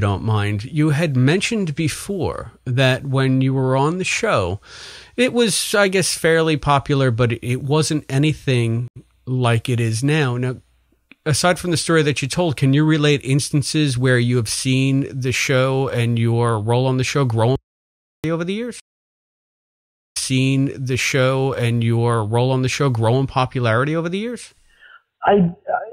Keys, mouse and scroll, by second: 1.0 click, 2.3 click, 4.0 click, 4.9-5.9 drag, 6.7 click, 7.8 click, 8.8 Delete, 9.2 click, 10.0-11.8 drag, 12.7 click, 13.1 click, 13.8 click, 14.6 ctrl+s, 15.9 click, 17.3 click, 18.7 space, 19.2 click, 20.0 click, 20.0 space, 22.8 ctrl+s.